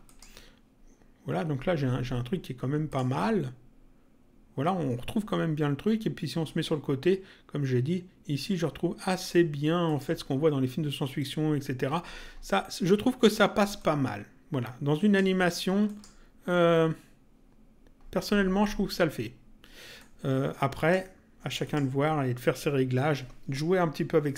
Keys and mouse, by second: 0.0 click, 2.8 click, 6.4 click, 9.8 click, 13.7 click, 15.8 click, 19.9 click, 21.6 click.